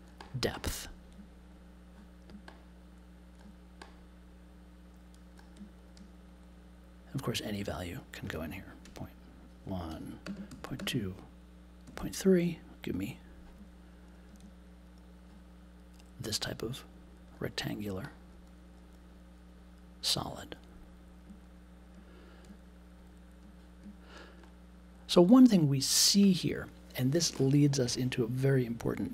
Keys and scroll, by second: 9.8 1, 10.2 space, 10.5 2, 10.8 space, 11.8 3.